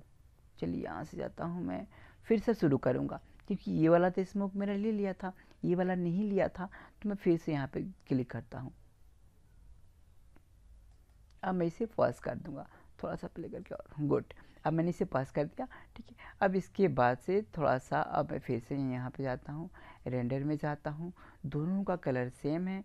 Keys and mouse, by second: 8.1-10.0 drag, 11.0 click.